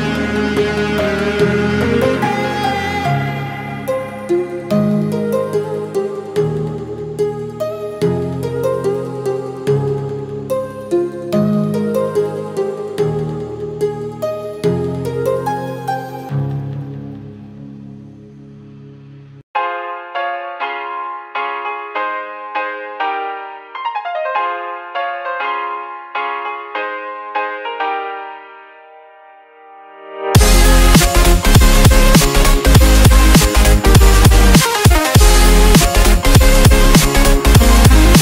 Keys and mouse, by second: 1.1 Return, 2.3 click, 3.7 ctrl+d, 4.9-15.6 drag, 17.9 Delete, 18.8 ctrl+d, 19.6 click, 20.9 ctrl+t, 21.9-28.9 drag, 28.9 Return, 30.2 click, 31.6 ctrl+d, 34.4-38.2 drag.